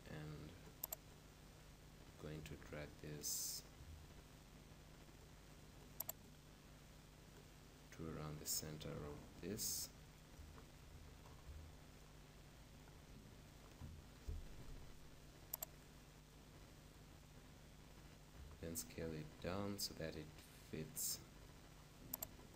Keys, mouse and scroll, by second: 3.5 z, 6.0-7.8 drag, 8.8-14.5 middle drag, 10.6 KP_5, 15.6-17.4 drag, 18.2 s, 22.4-22.5 drag.